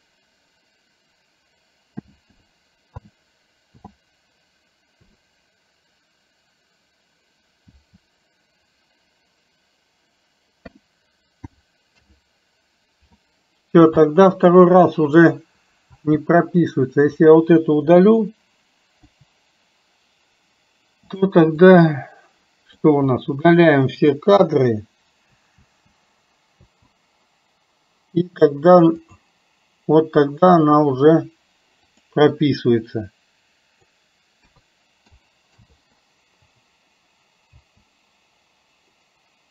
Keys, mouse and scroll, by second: 16.9-17.3 drag, 21.2 click, 21.8-23.0 drag, 23.2-23.8 drag, 29.1-35.8 drag.